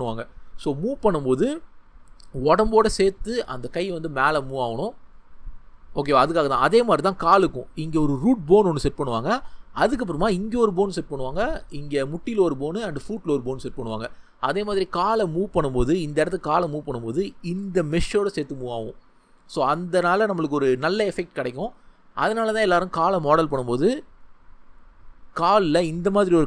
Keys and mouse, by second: 6.4-7.4 shift+middle drag, 11.1 shift+middle click, 22.3 shift+middle click, 26.1 ctrl+middle click.